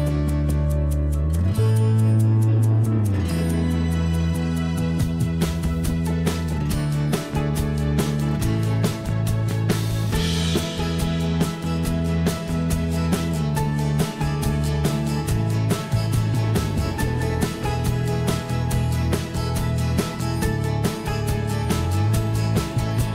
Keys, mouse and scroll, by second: 0.1 o, 1.2 m, 6.4-6.9 x, 18.7 s, 21.6 s.